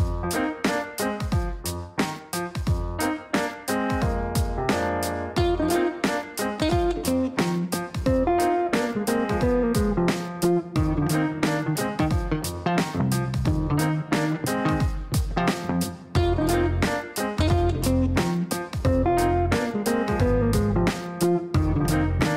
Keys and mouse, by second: 0.3 click, 1.5 click, 2.5 click, 3.5 click, 4.2 right click, 5.5 click, 16.1 click, 17.5 click, 20.8 click.